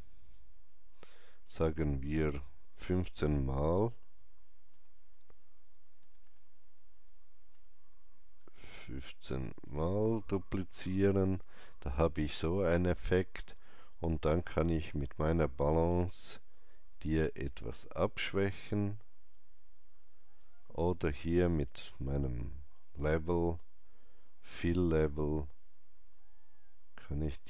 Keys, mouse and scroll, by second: 2.7 click, 2.7 scroll up 1, 2.7 KP_1, 2.9 KP_5, 4.6 BackSpace, 5.9 BackSpace, 7.4 Delete, 8.3 KP_1, 8.6 KP_5, 9.5 Return, 15.1 Return, 15.1-22.7 drag, 15.1 KP_5, 22.2 KP_Enter, 24.5 KP_Enter, 24.5-27.2 drag, 27.3-27.4 drag.